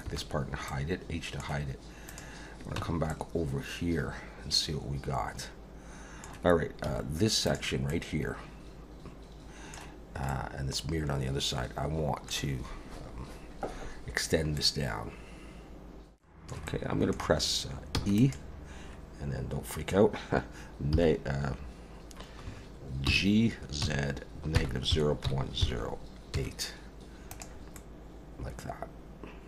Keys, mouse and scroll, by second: 0.0 h, 0.7 middle click, 2.1 click, 2.8 Tab, 3.1 middle click, 6.9 2, 7.4 click, 7.9 middle click, 10.3 middle click, 14.6 middle click, 16.1 ctrl+z, 16.1 click, 16.1 scroll up 2, 16.4 shift+middle click, 16.7 middle click, 17.9 e, 20.9 -, 22.4 Escape, 23.1 g, 27.7 middle click.